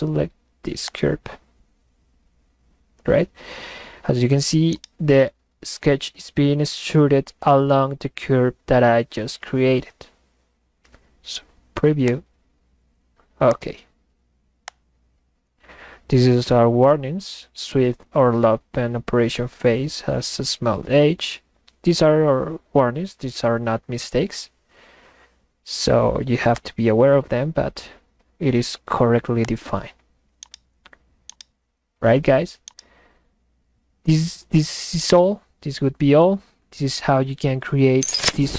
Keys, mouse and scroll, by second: 4.6-5.5 middle drag, 4.9-5.7 right drag, 12.1 click, 13.5 click, 14.7 click, 26.5 click, 29.4 click, 30.3-30.9 middle drag, 31.3-32.3 middle drag, 31.3-32.4 right drag, 32.6-34.5 middle drag, 32.8-34.6 right drag, 34.9-35.7 middle drag, 35.0-35.8 right drag.